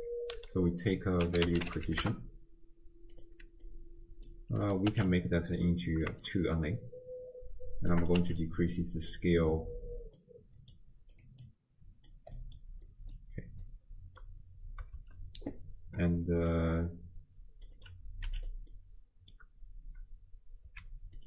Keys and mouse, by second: 3.6 click, 4.6 click, 6.2-7.9 shift+drag, 8.0 click, 9.2-10.2 drag, 10.6 click, 11.4-12.1 drag, 12.4 middle click, 12.9 click, 13.7 click, 13.8 click, 15.0 shift+space, 16.5-17.7 drag, 17.8 click, 18.7 middle click, 20.7 z.